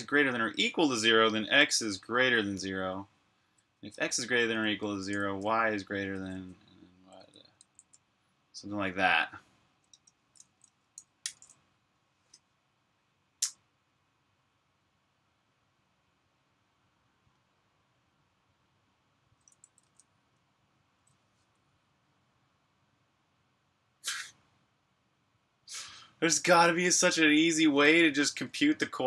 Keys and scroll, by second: 0.0-0.4 typing, 2.4 Left, 3.2 typing, 4.6 typing, 7.4 super+s, 9.8 super+Tab, 10.9-12.6 typing, 19.7 super+Tab.